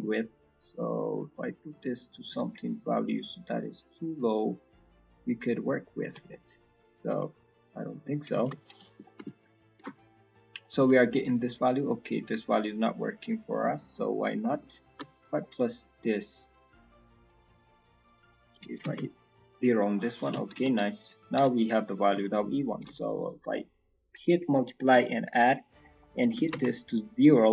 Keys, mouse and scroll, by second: 6.2 middle click, 6.5-7.3 scroll up 1, 7.5 click, 8.8 scroll down 5, 9.0 ctrl+middle click, 9.7 ctrl+shift+click, 10.0 middle click, 10.2 scroll up 1, 10.5 middle click, 10.8 scroll down 4, 11.0 middle click, 11.4 scroll up 5, 11.7 middle click, 12.8 middle click, 13.6 middle click, 13.8 scroll up 3, 14.8 ctrl+shift+click, 15.4 middle click, 15.9-16.8 scroll up 2, 16.1 middle click, 17.0 middle click, 18.0 click, 19.4 middle click, 20.0 middle click, 21.1 ctrl+shift+click, 21.6 scroll down 4, 21.8 middle click, 22.7 ctrl+shift+click, 23.5 middle click, 24.9-25.6 scroll up 4, 25.6 click.